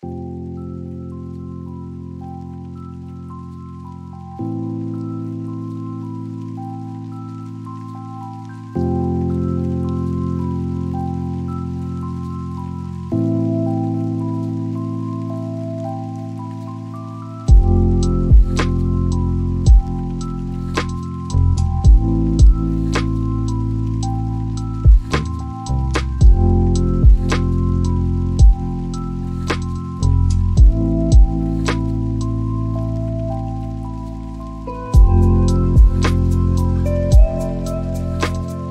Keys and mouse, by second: 0.7 click, 2.7 click, 3.3 click, 8.8 click, 9.4 click, 13.2 click, 16.1 n, 19.9 click, 22.5-28.6 drag, 29.8-32.9 drag, 33.9 right click, 35.8 drag, 36.8 click.